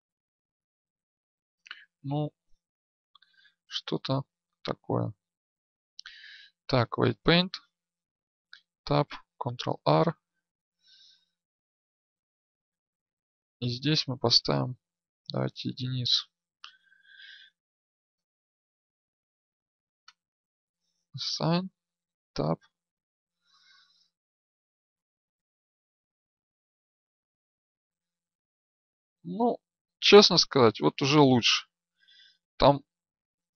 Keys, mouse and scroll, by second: 1.2 ctrl+z, 4.4 right click, 6.7-8.4 drag, 8.4 Tab, 9.5 ctrl+r, 22.0 Tab, 22.0-23.3 drag, 25.0 Tab, 25.0-33.5 drag, 25.9 right click.